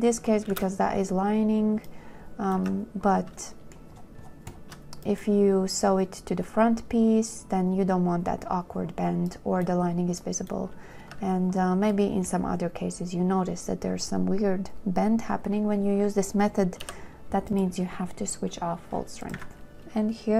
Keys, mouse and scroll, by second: 0.8 space, 2.8 2, 3.7 shift+click, 11.3 2, 17.1 b, 19.6 a, 19.8 ctrl+k, 20.0 shift+right click, 20.2 click.